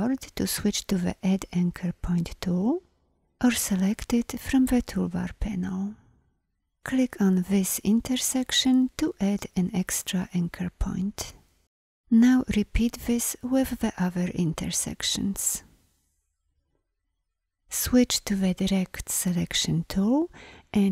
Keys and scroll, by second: 18.5 a.